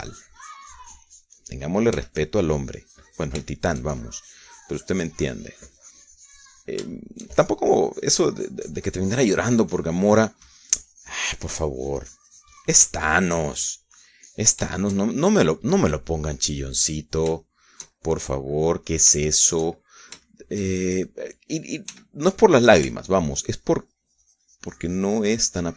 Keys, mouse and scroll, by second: 1.3 shift+middle click, 1.4-3.3 shift+drag, 3.7 f, 3.9-8.7 drag, 12.1-15.2 drag, 15.2 shift+middle click, 15.3-16.3 shift+drag, 16.4-19.2 shift+middle drag, 19.2-20.8 shift+drag, 19.2-20.8 shift+right drag, 20.8-23.6 shift+middle drag, 23.6 f, 24.4 ctrl+click, 24.8-25.7 ctrl+drag.